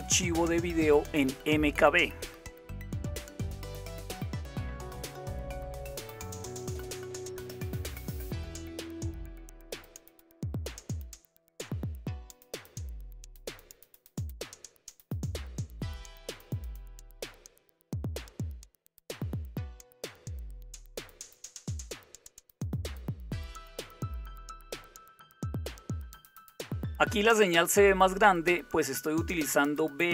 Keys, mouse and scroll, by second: 0.6-3.8 typing, 5.3 typing, 7.3-8.6 typing, 9.1 Delete, 9.3 Delete, 9.6 Delete, 10.1 Delete, 15.1-18.6 typing, 21.4 Return.